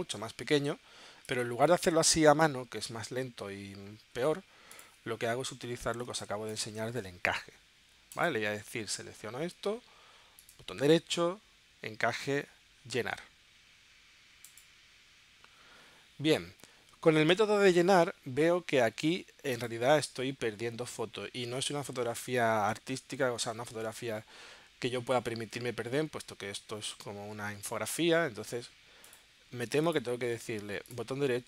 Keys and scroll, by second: 4.1 super+z, 6.1 space.